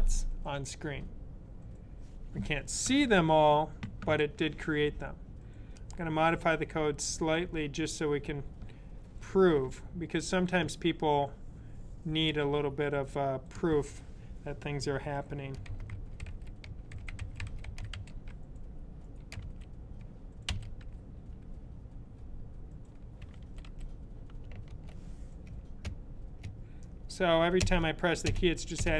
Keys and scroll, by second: 15.2-19.1 typing, 20.3 typing, 22.8-23.5 typing.